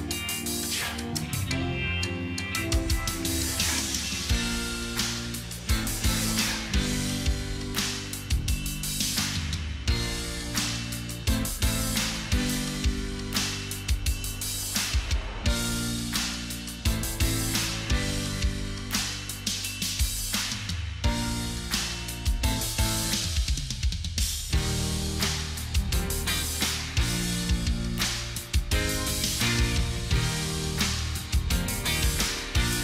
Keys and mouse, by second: 6.4 shift+click, 8.0 ctrl+j, 11.2 ctrl+t, 19.0 ctrl+t, 19.3 ctrl+t, 30.5 ctrl+j.